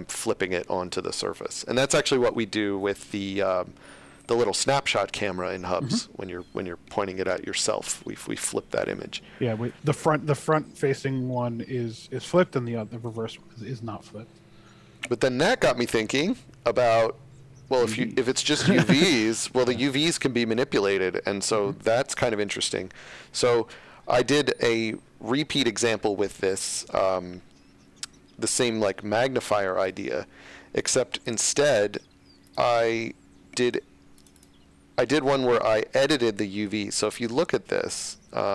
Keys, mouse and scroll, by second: 12.7 middle click, 29.8 click, 35.9 right click, 37.6-38.0 scroll down 1, 38.0 scroll up 1.